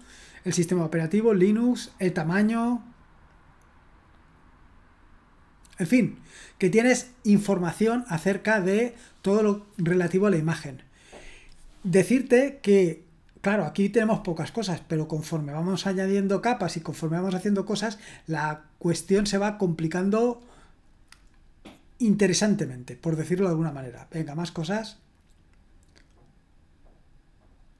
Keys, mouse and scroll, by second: 1.4 click, 2.0 click, 2.3 click, 3.5-4.4 scroll down 1, 4.6-6.0 scroll down 1, 20.3-24.3 scroll down 8, 24.8-25.1 scroll down 1, 26.9-27.5 scroll down 1, 27.5-27.7 scroll up 1.